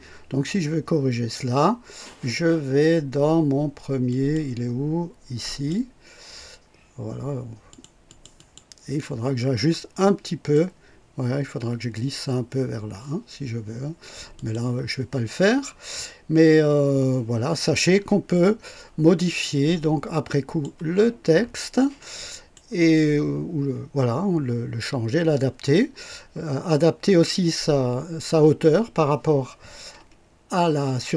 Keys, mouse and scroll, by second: 4.0 click, 5.4 click, 7.6 click, 8.0 click, 9.1-9.7 scroll down 3, 10.0-10.6 right drag, 14.3 click, 18.2-18.5 scroll down 2, 19.1-20.8 drag, 21.3 scroll up 2, 21.9-22.7 right drag, 22.9-24.9 drag.